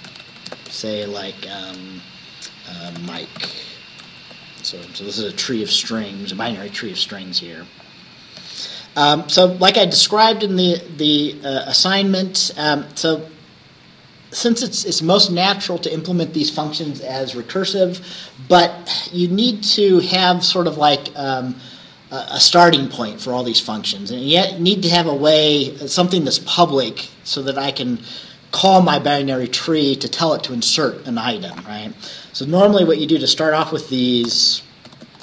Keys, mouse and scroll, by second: 0.0-1.6 typing, 2.8-4.8 typing, 7.9 ctrl+click, 8.5 ctrl+s, 9.2-9.8 scroll up 2, 10.6-11.8 scroll up 3, 12.7 scroll down 1, 26.6 scroll up 2, 33.6 click, 34.4 Return, 35.0-35.2 typing.